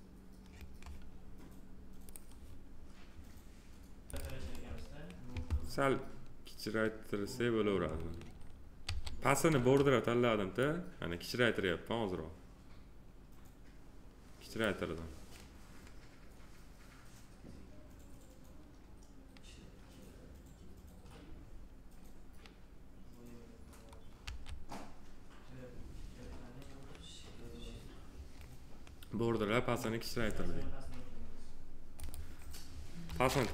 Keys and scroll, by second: 8.8 r, 24.2 w.